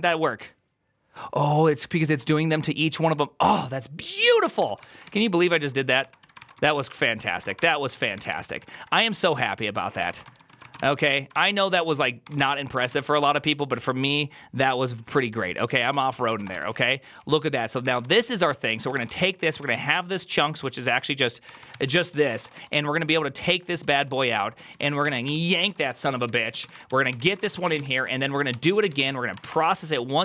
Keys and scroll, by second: 4.4 Return, 4.7 ctrl+c, 4.9-13.2 typing, 7.5 ctrl+c, 15.4 alt+{, 15.8-30.2 typing.